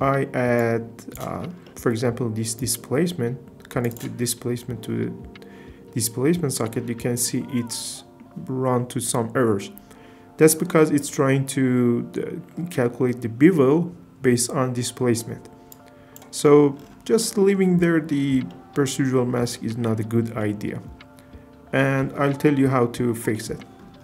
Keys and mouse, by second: 0.6 click, 2.6 drag, 3.9 click, 7.0-7.3 shift+middle drag, 15.8 click, 17.2-18.7 middle drag, 20.4 middle click, 23.3 middle click.